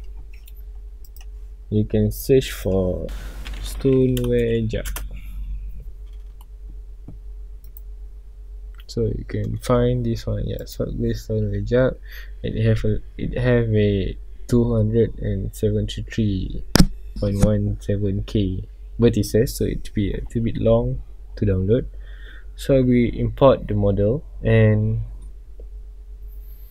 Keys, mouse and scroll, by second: 1.1 click, 5.0 click, 5.0 Return, 7.7 click, 20.7 scroll up 1.